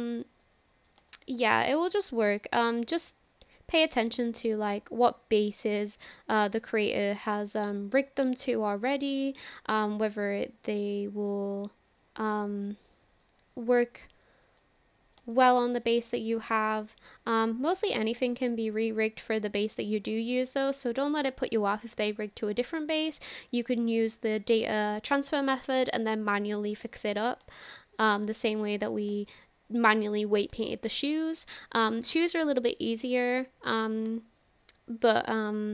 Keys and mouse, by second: 0.4 middle click, 1.1 shift+middle click, 3.5-6.0 drag, 6.4-8.0 middle drag, 9.4-11.3 drag, 11.8-13.2 drag, 13.6 click, 14.6 middle click, 15.3 shift+middle click, 15.9 middle click, 17.2 click, 18.4-19.9 middle drag, 20.4-25.5 middle drag, 25.8 shift+middle click, 26.3 middle click, 27.6 shift+middle click.